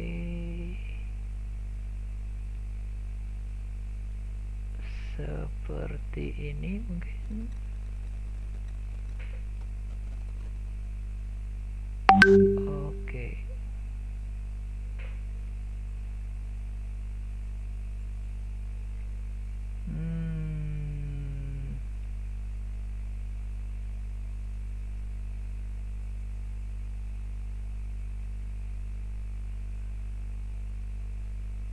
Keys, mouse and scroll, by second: 13.6-14.5 scroll down 1, 14.5-15.5 scroll up 1, 15.5-19.8 middle drag, 19.8-20.6 scroll down 1, 20.6-22.5 scroll up 1, 22.5-23.7 scroll down 1, 23.7-24.8 scroll down 1, 24.8-25.4 scroll up 1, 25.4-26.6 scroll down 1, 26.6-27.2 scroll down 1, 27.2-28.5 scroll up 1, 28.5-31.7 shift+middle drag.